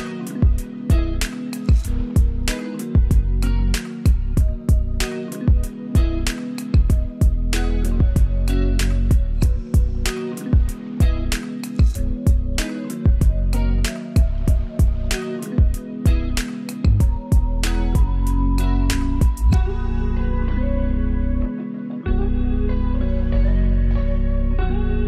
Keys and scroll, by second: 15.2 super+c, 19.3 super+v.